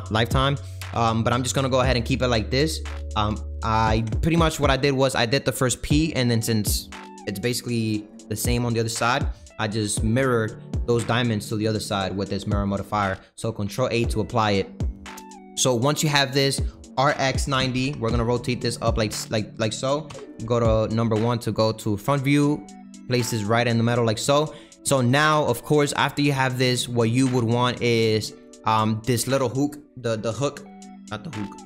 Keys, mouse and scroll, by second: 1.8-13.4 scroll down 1, 13.4 ctrl+a, 14.1 click, 14.5 middle click, 14.8-15.2 scroll down 3, 15.2-16.3 middle drag, 16.3 click, 16.9 r, 18.9-20.0 middle drag, 20.0 KP_1, 21.0 g, 24.3 click, 24.9 click, 25.2 middle click, 26.0-26.4 scroll up 3, 26.4-31.6 shift+middle drag.